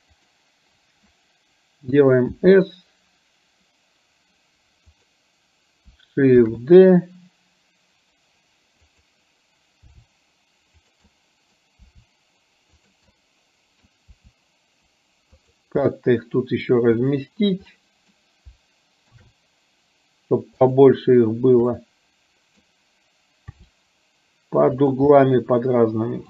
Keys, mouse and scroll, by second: 0.2 click, 2.4 s, 6.6 shift+d, 10.0 r, 11.2 middle click, 11.9 r, 13.2 middle click, 14.1 r, 16.0 middle click, 17.9 middle click, 19.2 shift+d, 21.9 middle click, 23.7 r, 25.2-26.2 middle drag.